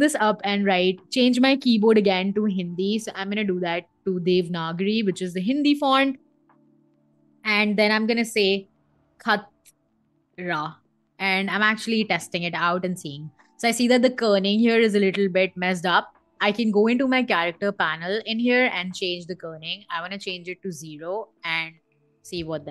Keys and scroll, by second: 8.2 shift+k, 9.7 t, 10.3 r, 10.7 a, 11.3 Escape, 20.8 0, 21.1 Return.